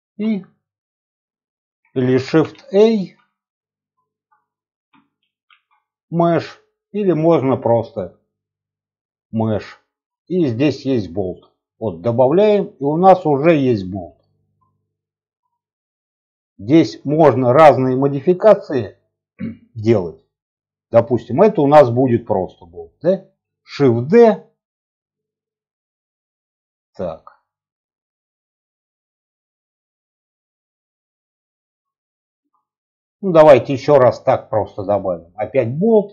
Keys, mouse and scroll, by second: 2.5 shift+a, 3.0 shift+a, 3.1 shift+a, 5.2 shift+a, 6.9 click, 8.5-12.1 drag, 12.9-13.6 scroll down 2, 13.6-14.4 scroll up 3, 14.1 shift+middle click, 14.6 middle click, 15.4 shift+middle click, 15.8-16.3 scroll up 1, 16.3 scroll down 1, 16.6 shift+middle click, 17.9 click, 19.4 click, 20.7-21.2 middle drag, 21.3-22.0 shift+middle drag, 22.1 middle click, 23.7 shift+d, 29.4 click, 31.7-32.0 scroll down 1, 32.1 shift+middle click, 33.5-35.3 drag.